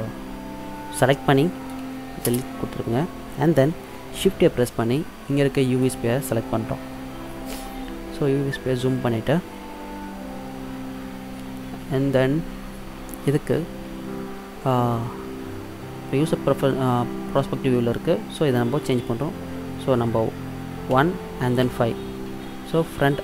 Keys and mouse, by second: 1.9 Delete, 4.2 shift+a, 7.4 middle click, 21.0 KP_1, 21.8 KP_5.